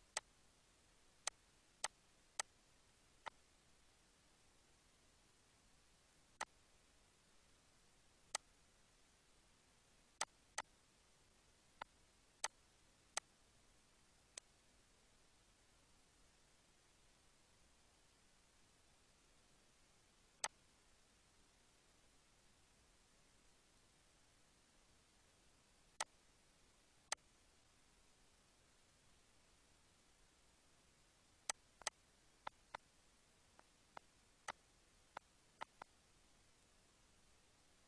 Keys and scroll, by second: 19.0 ctrl+s, 25.2 ctrl+d.